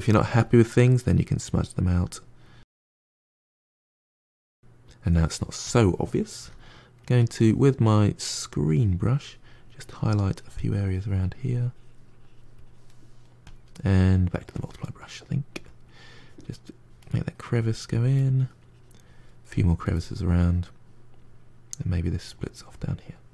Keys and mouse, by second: 0.0 f, 0.6 middle click, 1.1-3.1 drag, 3.1 middle click, 3.3 click, 4.0-5.5 middle drag, 5.5 click, 6.2 f, 8.3 middle click, 8.9-14.7 drag, 14.7 middle click, 15.4 f, 16.0 click, 17.0 middle click, 17.5 click, 18.0 middle click, 18.4-19.8 drag, 19.8-21.0 middle drag, 21.0-23.3 drag.